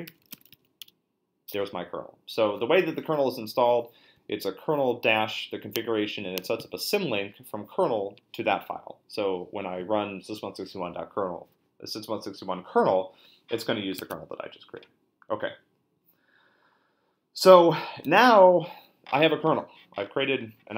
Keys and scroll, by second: 0.0-1.0 typing, 14.0 super+Tab, 18.0 super+Tab.